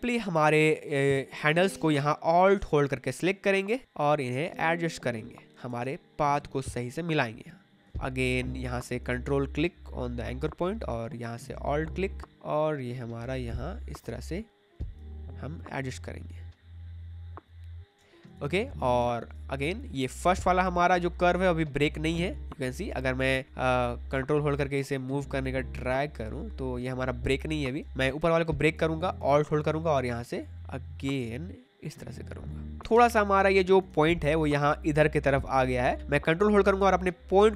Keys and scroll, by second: 5.8 space, 7.9 ctrl+z, 17.9 space, 27.8 ctrl+z, 32.9 space.